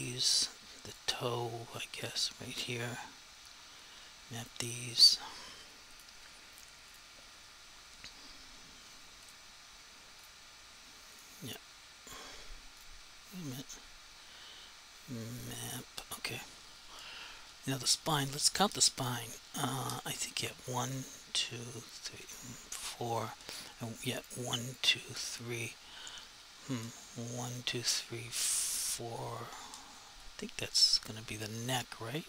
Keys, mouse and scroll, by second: 24.2 click, 28.8 click, 30.1 r, 31.8 right click.